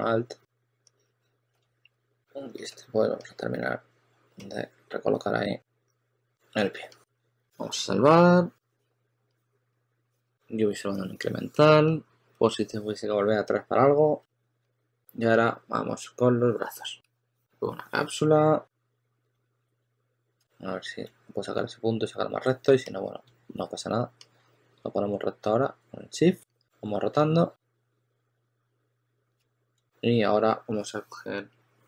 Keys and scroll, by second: 1.3-2.4 typing, 10.5 1, 14.5 s, 20.3 super+z, 23.5 e, 28.5 w, 29.2 q, 29.4 super+z, 29.5 super+z.